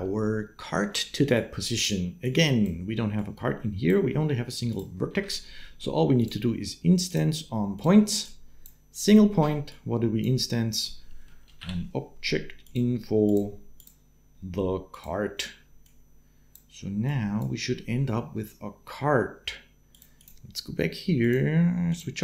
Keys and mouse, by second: 1.5 click, 3.0 click, 4.5 click, 5.0 shift+a, 8.1 click, 9.5-13.1 drag, 13.6-14.8 drag, 15.6 click, 16.9 click, 19.7 click, 20.0 click.